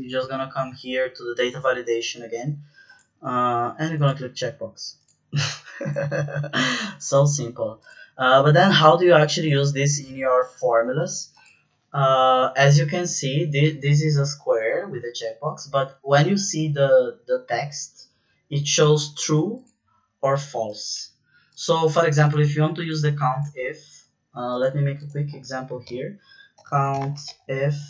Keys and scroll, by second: 26.6-27.7 typing.